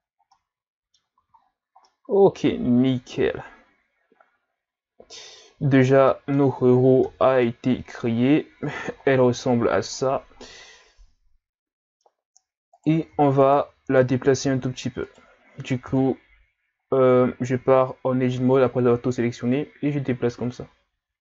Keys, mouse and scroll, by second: 0.3 middle click, 1.2 a, 1.4-1.8 scroll down 1, 1.8-4.1 middle drag, 4.1-6.1 scroll down 2, 6.1-7.1 middle drag, 7.1 KP_Divide, 8.1-8.9 scroll down 1, 8.9-10.0 shift+scroll up 6, 10.0 scroll down 1, 10.4-12.2 middle drag, 12.2-12.7 scroll up 3, 12.7 right click, 13.4 shift+right click, 14.4 g, 15.9 KP_3, 17.1 Tab, 17.8 scroll down 2, 18.0 a, 18.3 a, 19.5 click.